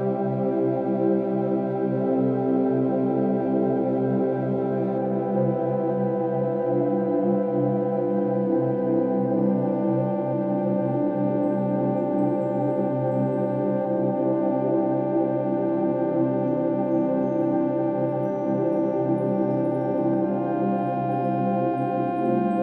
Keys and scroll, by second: 1.2 ctrl+e, 2.1 F2, 2.3 ctrl+t, 3.6 Right, 3.8 Up, 4.1 Left, 4.5 ctrl+h, 5.1 Down, 6.3 space, 18.4 space.